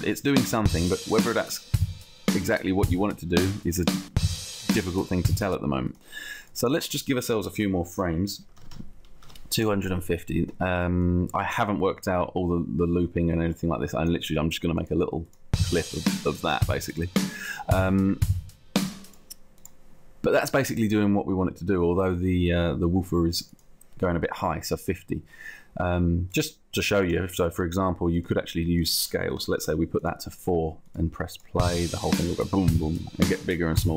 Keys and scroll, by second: 8.3 2, 8.6 0, 8.8 Return, 30.0 4.